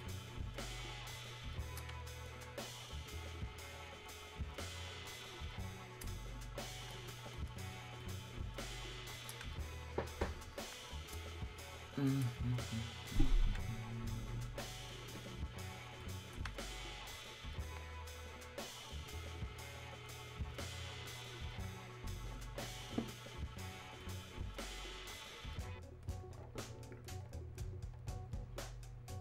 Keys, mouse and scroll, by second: 2.3-14.0 alt+drag, 14.0-18.0 drag, 18.0-21.5 alt+drag, 21.5-24.8 alt+drag.